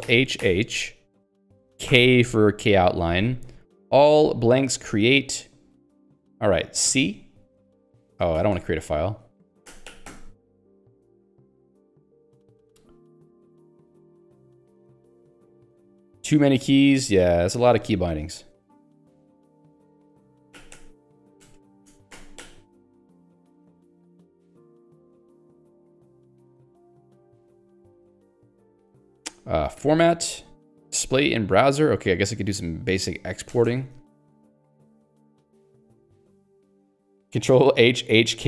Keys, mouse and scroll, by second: 1.9 k, 6.9 c, 8.4 ctrl+g, 10.1 k, 16.9 a, 17.7 ctrl+g, 20.6 h, 21.4 ctrl+g, 23.0 k, 29.8 shift+f, 33.5 ctrl+g, 33.8 ctrl+g.